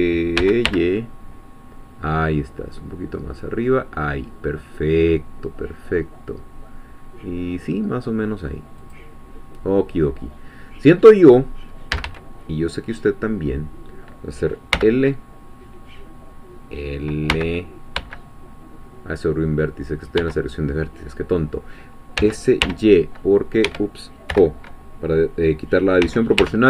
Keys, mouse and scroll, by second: 0.0-1.3 typing, 3.0 scroll down 2, 8.8 click, 9.5-9.8 scroll down 2, 10.1-11.1 middle drag, 11.9 a, 20.2 l, 22.2 s, 22.6 y, 23.7 Escape, 24.3 o, 26.0 s, 26.4 y.